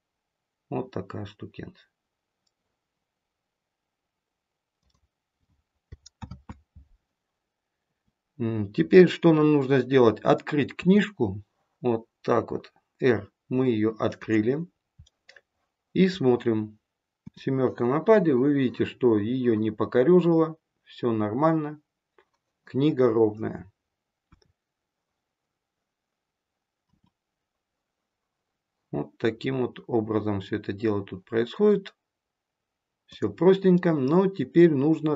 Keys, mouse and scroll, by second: 6.1 ctrl+z, 14.6 scroll down 2, 15.0 middle click, 17.1 KP_7, 24.2 KP_1, 26.8 r, 33.7 middle click.